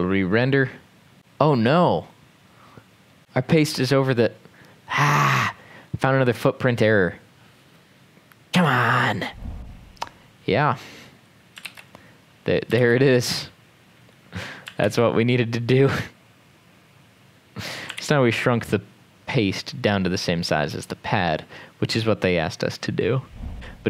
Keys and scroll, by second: 8.7 super+Left, 11.7 ctrl+c, 12.8 ctrl+v, 14.8 ctrl+s, 18.0 ctrl+s.